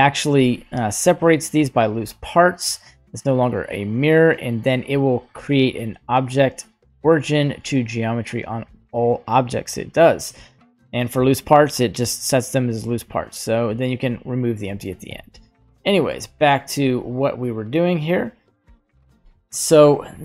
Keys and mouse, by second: 0.3 g, 5.6 right click, 6.3 right click, 13.9 click, 15.1 middle click, 15.7 middle click, 16.5-18.7 drag, 19.7 right click.